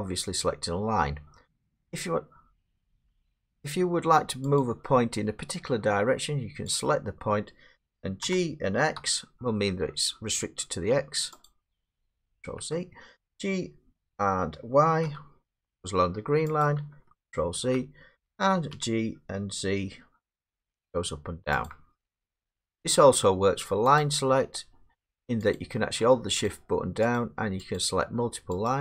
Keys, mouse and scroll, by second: 3.4 middle click, 4.6 click, 6.8 click, 8.2 g, 9.0 x, 10.4 typing, 12.1 ctrl+z, 12.1 click, 12.3 ctrl+z, 14.0 g, 15.0 y, 16.6 click, 17.6 ctrl+z, 18.7 g, 20.3 z, 21.7 click, 22.4 ctrl+z, 24.0 click, 25.6 click, 26.5 shift+click, 27.2 click, 27.8 click, 28.7 shift+click.